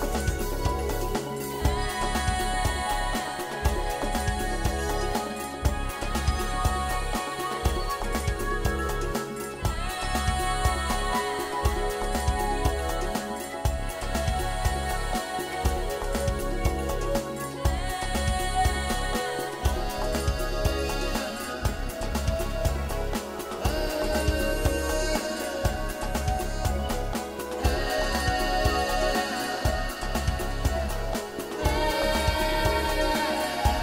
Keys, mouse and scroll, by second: 0.9 Delete, 2.7 shift+middle click, 3.1 shift+middle click, 3.4 shift+middle click, 4.1 middle click, 5.1 click, 5.4 shift+click, 6.9 Delete, 7.4 middle click, 10.7 middle click, 11.4 scroll down 3, 11.7 shift+middle click, 12.0 middle click, 13.4 middle click, 13.7 shift+middle click, 14.9 middle click, 16.9 click, 17.0 shift+click, 17.7 shift+click, 18.0 shift+click, 18.5 click, 18.7 shift+click, 19.1 shift+click, 19.4 shift+click, 19.9 shift+click, 20.4 middle click, 21.0 KP_1, 21.9 e, 24.9 click, 25.0 middle click, 29.4-29.9 scroll down 3, 29.9 middle click, 32.2-32.5 scroll up 3, 33.1 click, 33.6 click.